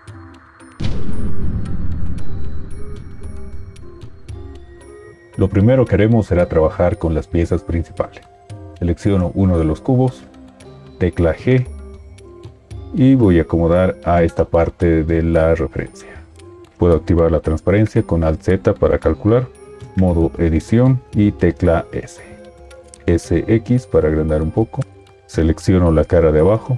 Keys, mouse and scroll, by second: 10.9 g, 18.1 alt+z, 20.4 Tab, 22.0 s, 23.0 s.